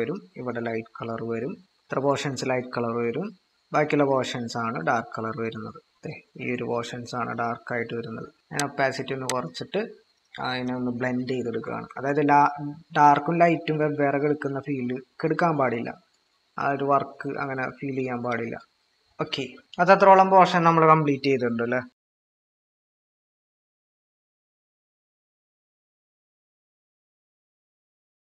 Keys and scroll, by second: 11.6-12.1 typing, 19.4 ctrl+-, 24.8-25.5 typing.